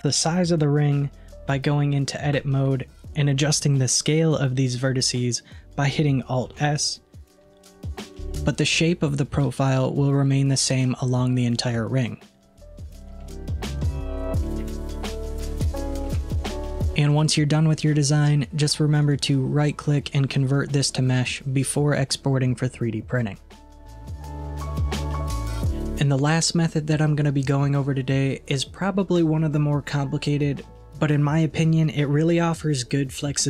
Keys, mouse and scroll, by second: 2.4 Tab, 6.5 alt+s, 12.4-13.3 scroll down 2, 13.3-14.7 middle drag, 14.7 alt+z, 15.0-15.3 scroll down 1, 15.3 middle click, 16.2 Tab, 16.7 middle click, 19.1-22.1 right drag, 22.3-25.3 middle drag.